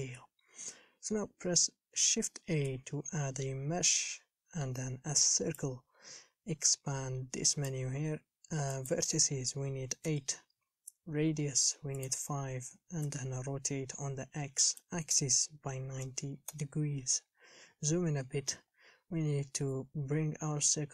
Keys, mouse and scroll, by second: 10.3-17.9 drag, 17.9 scroll up 3, 18.9-19.8 scroll up 1.